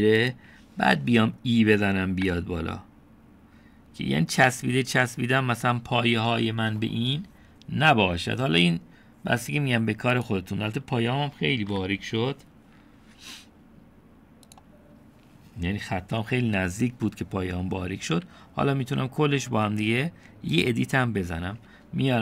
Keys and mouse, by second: 3.3 e, 12.7 KP_7.